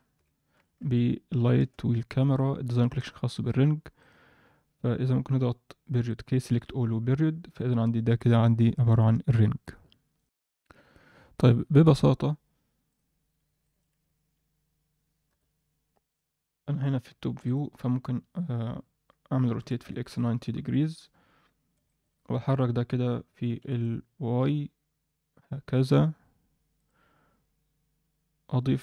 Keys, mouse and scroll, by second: 2.7 click, 3.4 click, 3.9 click, 5.3 KP_Decimal, 6.0 click, 6.5 a, 6.7 KP_Decimal, 8.1 scroll down 1, 8.3-9.1 scroll up 1, 10.2 F10, 10.2 click, 12.8 click, 13.3 scroll down 1, 13.6 shift+middle click, 15.3 KP_7, 16.0 click, 16.3-17.4 scroll down 2, 17.4 click, 18.6 KP_7, 19.5 r, 21.2 scroll up 1, 21.5 Tab, 21.8 shift+middle click, 22.2-22.6 scroll up 1, 23.5 g.